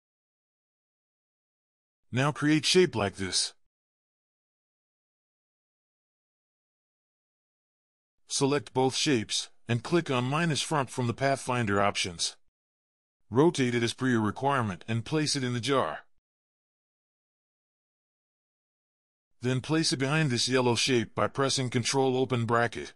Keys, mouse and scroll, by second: 0.9 alt+click, 2.3 v, 2.7 ctrl+z, 3.5 a, 4.8 double click, 14.6-15.0 alt+scroll down 3, 15.3 ctrl+scroll up 1, 16.8 alt+scroll up 1, 17.0-17.9 scroll down 2, 18.8 alt+scroll up 1, 20.7 ctrl+], 20.7 ctrl+], 20.8 ctrl+[, 21.0 ctrl+[, 21.2 ctrl+[, 21.4 ctrl+[, 21.8 ctrl+[, 21.9 ctrl+[, 22.6 ctrl+].